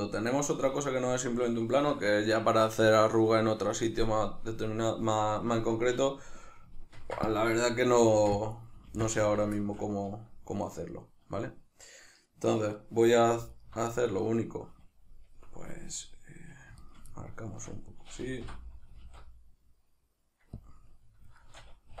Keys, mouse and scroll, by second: 0.9 shift+middle click, 5.5 shift+middle click, 6.9 ctrl+r, 7.6 right click, 8.1 ctrl+r, 8.6 right click, 8.9 ctrl+r, 9.3 right click, 9.5-13.6 shift+middle drag, 13.6 alt+right click, 14.1 right click, 16.8 shift+right click, 17.1-20.7 middle drag, 18.4 o, 19.0 alt+s, 20.7 click, 21.4-22.0 shift+middle drag.